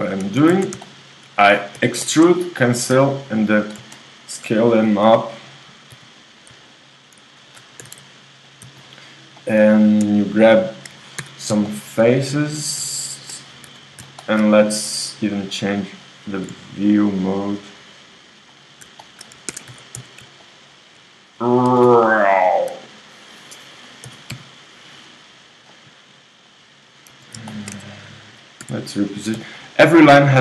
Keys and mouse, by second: 0.6 shift+z, 1.8 e, 2.9 s, 5.9 g, 6.7-7.8 drag, 7.8 s, 8.9-11.2 middle drag, 11.2 click, 11.2 KP_3, 12.0 middle click, 13.2-14.8 drag, 13.7 KP_3, 14.8 middle click, 15.1-16.5 drag, 16.5 g, 19.5 ctrl+Tab, 20.0 z, 20.4-21.7 ctrl+drag, 21.7 g, 24.1 s, 27.1-28.6 drag, 27.1 z, 27.8 z, 28.6 a, 29.4 b.